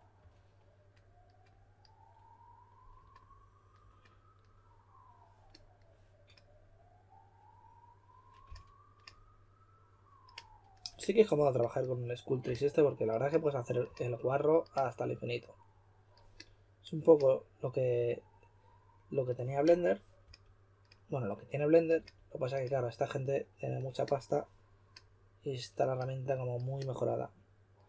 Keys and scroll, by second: 0.0-0.6 typing, 8.4 s, 12.4 typing, 13.8 typing, 20.2 typing, 21.9 typing.